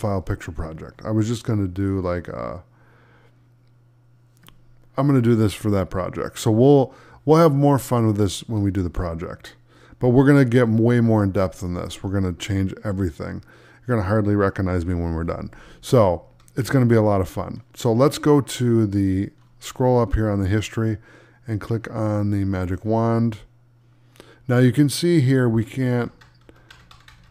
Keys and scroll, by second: 9.1 space, 25.9 ctrl+z.